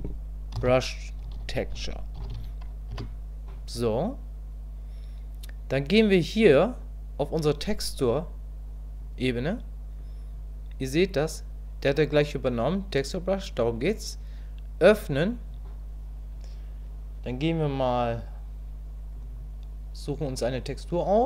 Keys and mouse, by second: 14.9 click.